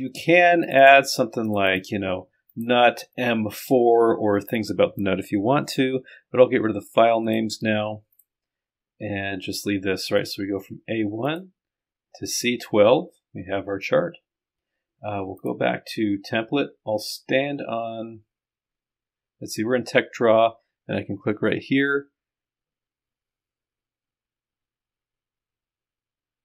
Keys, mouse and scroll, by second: 0.7 click, 7.2 click, 8.1 click, 10.2 click, 11.3 click, 15.4 click, 17.1 click.